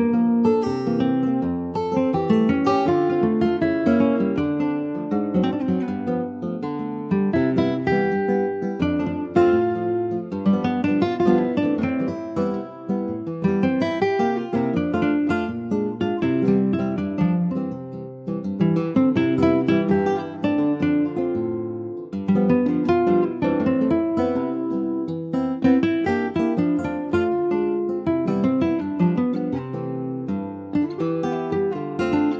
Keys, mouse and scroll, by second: 0.2 middle click, 0.9 shift+scroll up 2, 2.5 ctrl+r, 6.6-7.0 scroll up 2, 7.0 shift+middle click, 7.6 click, 8.6 3, 8.7 click, 9.0-9.7 scroll up 2, 9.7 alt+shift+click, 11.0 ctrl+b, 14.8 alt+shift+click, 15.8 e, 16.3 alt+s, 18.1-19.3 middle drag, 19.3 2, 19.4 click, 20.1 alt+shift+click, 20.9 ctrl+b, 29.7 Tab, 29.9 click, 30.1 scroll down 3, 30.4 middle click, 30.9 ctrl+s, 31.3 shift+middle click, 31.6-31.9 scroll up 3, 31.9 ctrl+s, 32.2 shift+middle click.